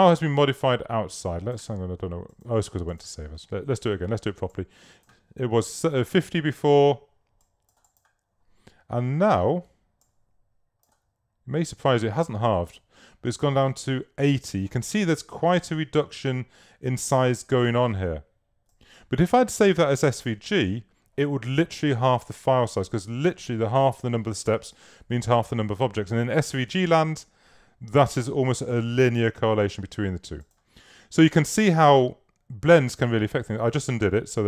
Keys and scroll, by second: 31.7 super+z.